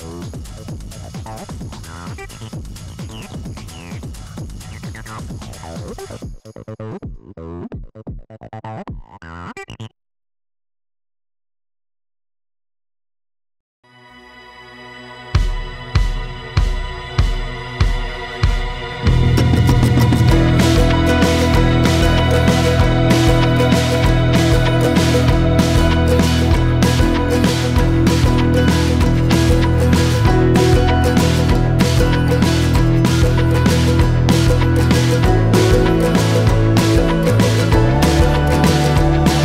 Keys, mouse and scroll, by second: 2.6 click, 3.1 Tab, 5.2-5.8 drag, 5.8-6.6 scroll up 4, 6.6 shift+middle click, 7.1 scroll up 2, 7.8-8.5 scroll up 6, 9.0 Tab, 9.8 click, 10.5 shift+click, 10.9 shift+click, 11.6 scroll up 2, 12.0 scroll down 1, 12.8-14.2 drag, 14.4-17.2 drag, 17.8 click, 20.6 Tab, 20.8-21.1 scroll down 3, 21.3 click, 22.1-22.8 scroll up 2, 22.8-24.4 drag, 25.2-26.1 scroll down 1, 26.2 middle click, 26.7 scroll up 4, 26.9 scroll down 3, 27.9 click, 31.1 scroll down 1, 33.3-33.8 scroll down 2, 33.8-34.6 scroll up 1, 34.6 click, 36.9 scroll up 4, 37.1-37.5 scroll down 4, 37.6 click, 38.3 click, 39.3 ctrl+shift+t.